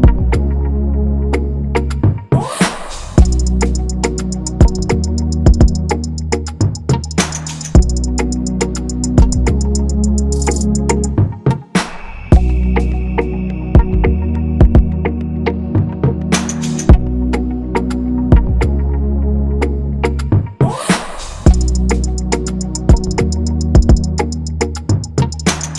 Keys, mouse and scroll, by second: 1.5 a, 3.5 ctrl+=, 3.7 ctrl+-, 5.1 ctrl+=, 5.1 ctrl+=, 5.2 ctrl+=, 5.6 scroll up 1, 7.6 ctrl+=, 7.7 ctrl+=, 8.3 scroll, 9.0-10.4 scroll up 1, 13.3 ctrl+c, 14.4 ctrl+f, 16.0 right click, 17.4-18.8 typing, 18.3-18.8 scroll, 20.3 typing, 22.5 Escape.